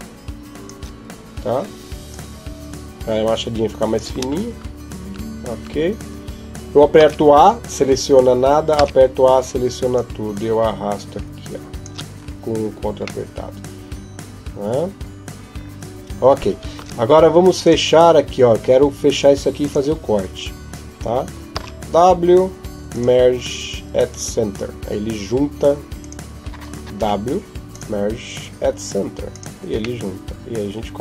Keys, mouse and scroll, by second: 1.9 ctrl+click, 4.8 Tab, 5.4 Tab, 6.8 a, 9.7 click, 13.0 middle click, 16.6 ctrl+Tab, 19.4 right click, 21.3 w, 25.8 right click, 26.8 w, 29.8 middle click.